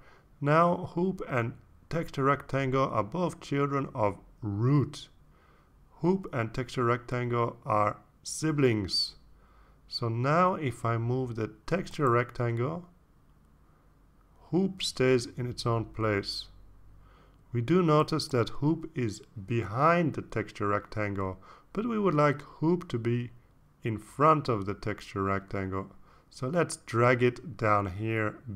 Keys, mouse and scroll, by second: 13.8 click, 15.1-17.5 drag, 18.3 ctrl+z.